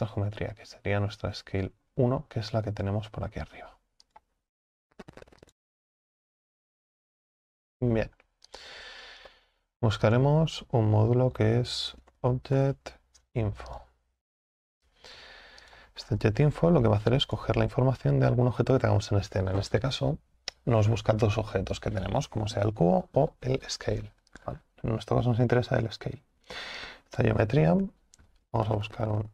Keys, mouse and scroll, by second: 27.2 click.